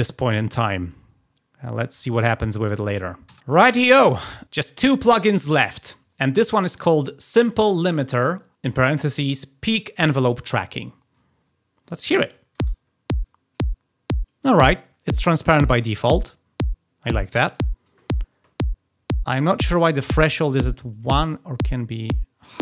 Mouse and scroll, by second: 2.1 click, 20.8-22.6 drag.